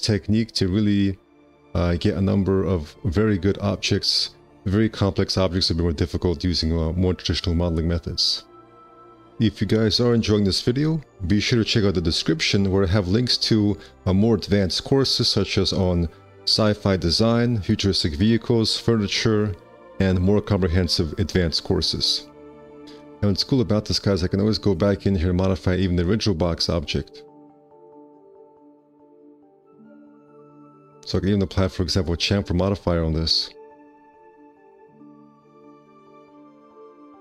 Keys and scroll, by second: 12.6 1, 15.3 F4, 17.2 a, 25.1 `, 25.6 2, 27.6 alt+x, 30.3 2, 33.3 c, 34.0 h.